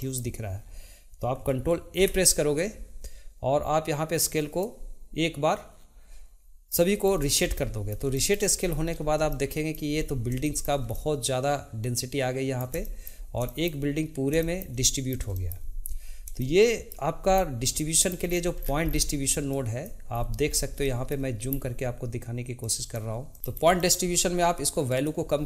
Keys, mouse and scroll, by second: 2.0 ctrl+a, 7.0-7.5 scroll up 3, 7.5-8.6 shift+middle drag, 8.6-9.3 scroll up 5, 9.3-10.0 shift+middle drag, 10.0 scroll up 1, 10.4-17.3 shift+middle drag, 17.3-17.8 scroll up 3, 17.8 shift+middle click, 18.4 scroll down 1, 19.5 click, 20.1-20.8 scroll up 6, 20.8-21.4 shift+middle drag, 21.4-22.0 scroll up 3, 22.6 click, 23.3-23.8 scroll up 3, 23.8-24.9 shift+middle drag, 24.9-25.4 drag.